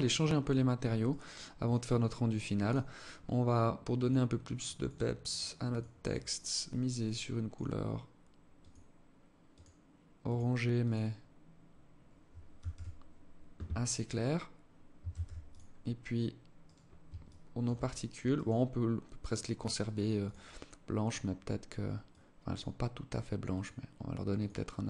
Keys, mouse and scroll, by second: 0.4 right click, 1.0 right click, 1.9 click, 14.4 ctrl+s, 16.0 right click, 16.5 alt+shift+click, 17.6 right click, 18.6 right click, 19.5 click.